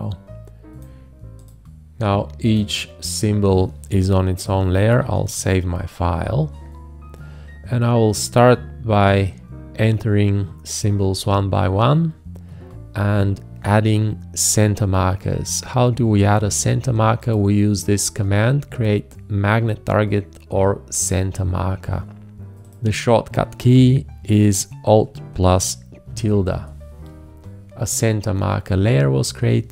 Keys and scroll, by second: 5.0 ctrl+s, 26.1 alt+`.